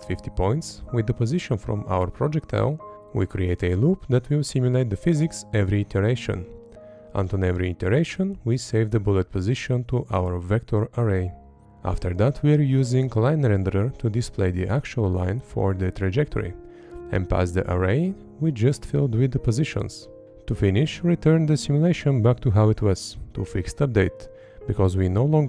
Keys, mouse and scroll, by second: 0.7 Up, 2.3 Up, 5.8 Right, 9.4 Up, 10.1 Up, 10.5 Up, 13.4 Left, 15.8 Up, 16.6 Up, 18.7 Left, 18.9 Up, 19.4 Right, 19.7 Up, 20.3 Left, 20.6 Up, 21.2 Right, 21.4 Up, 21.8 Up, 22.0 Left, 22.2 Up, 22.6 Up, 22.9 Right, 23.0 Up, 23.4 Up, 23.7 Left, 24.3 Up, 24.9 Right.